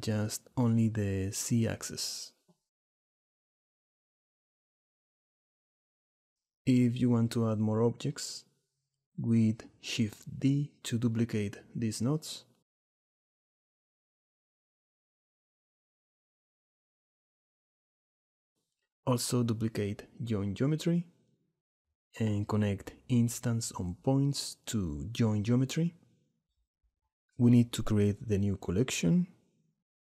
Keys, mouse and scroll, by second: 0.0 click, 1.3 click, 2.9-5.0 drag, 6.3 click, 7.3 click, 8.5 click, 10.8 click, 11.5 shift+click, 13.9 shift+drag, 14.5 shift+click, 15.1 click, 16.2 shift+d, 18.5 click, 19.1 click, 19.9 shift+d, 22.2-24.1 drag, 25.3 click, 27.6 click, 28.5 click, 29.9 shift+click.